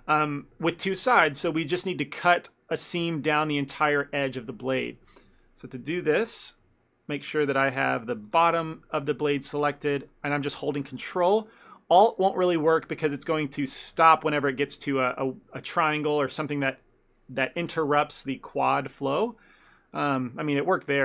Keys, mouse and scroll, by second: 0.4 middle click, 0.6 ctrl+middle click, 5.1 shift+middle click, 5.4 ctrl+middle click, 6.4 click, 6.7 z, 7.1 middle click, 7.4 ctrl+middle click, 7.7 middle click, 8.3 click, 8.6 ctrl+middle click, 9.0 shift+middle click, 9.4 ctrl+click, 9.7 ctrl+middle click, 10.0 shift+middle click, 10.9 ctrl+click, 11.4 shift+middle click, 13.1 alt+shift+click, 13.6 ctrl+middle click, 14.0 shift+middle click, 20.2 shift+middle click.